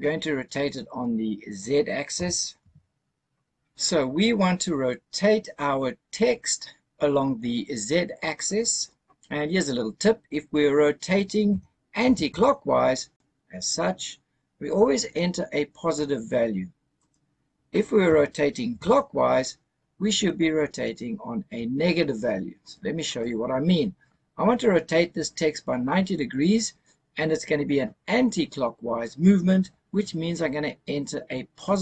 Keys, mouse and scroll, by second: 2.0 r, 2.5 z, 11.4 r, 11.9 z, 16.9 right click, 17.9 r, 18.6 z, 22.9 right click.